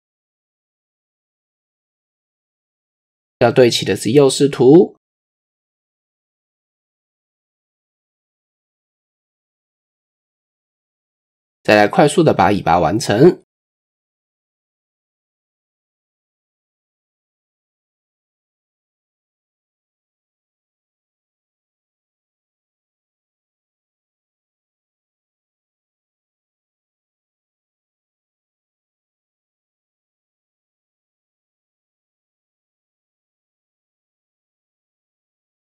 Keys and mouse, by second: 2.5 KP_3, 5.1 KP_3, 6.5-7.2 drag, 9.0 ctrl+4, 11.3 KP_1, 12.4 Tab, 13.4-15.2 drag, 15.8 KP_3, 16.7 shift+middle drag, 18.0 s, 19.5 drag, 21.4 e, 23.5 e, 25.2 shift+click, 25.6 click, 26.0 s, 27.2 click, 27.8 s, 29.0 r, 30.5 e, 31.4 s, 32.2 e, 33.2 s, 34.9 KP_1.